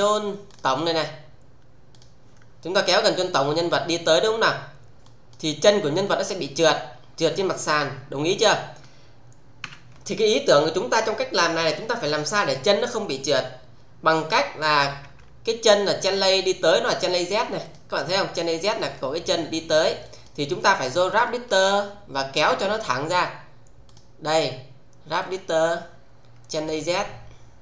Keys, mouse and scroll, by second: 0.5 click, 1.9 click, 3.6 w, 5.0 click, 9.6 z, 15.8 click, 17.6 click, 18.6 alt+click, 18.9-20.3 alt+right click, 19.4 alt+middle click, 20.0 alt+click, 20.5-21.1 alt+right click, 23.8 click, 25.2 click, 26.6 click.